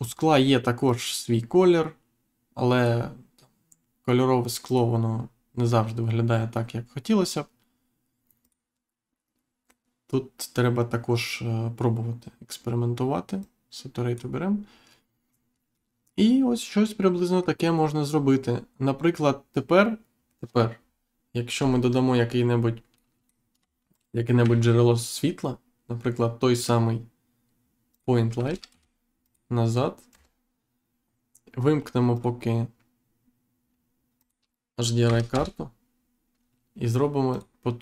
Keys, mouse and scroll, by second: 0.0 click, 0.8 click, 4.6 click, 8.4 click, 13.3 click, 15.7 middle click, 21.5 Insert, 22.2-22.6 scroll down 1, 22.9 middle click, 23.9 shift+right click, 24.3 shift+a, 27.9 click, 28.3 g, 28.6 z, 29.2 click, 30.0 Insert, 32.1 click, 34.1 click, 35.3 Return, 37.3 click.